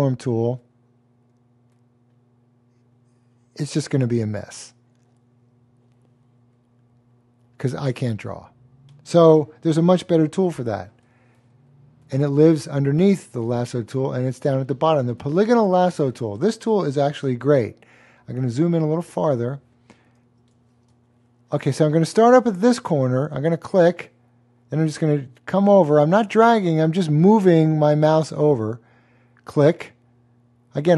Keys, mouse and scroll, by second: 12.0 super+d, 12.0 click, 17.2-18.5 super+space, 17.8 space, 18.4 click, 20.8-21.6 typing, 21.0 click, 21.3 click, 23.3 click, 25.5 typing, 29.1 click.